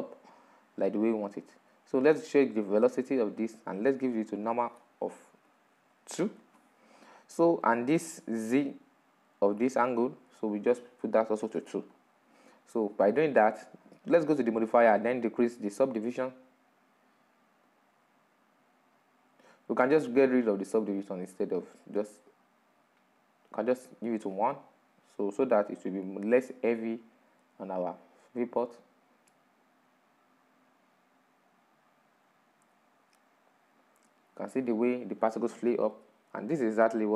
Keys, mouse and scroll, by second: 6.8-29.4 drag.